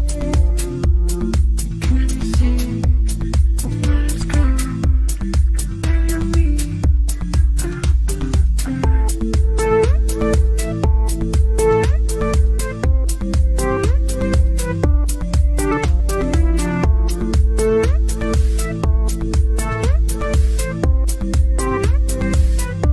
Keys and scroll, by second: 1.4 ctrl+Page_Down, 6.3 g, 9.5 F3, 12.9 shift+Page_Down, 13.3 F3, 13.4 Escape, 18.4 Escape, 18.7 F3.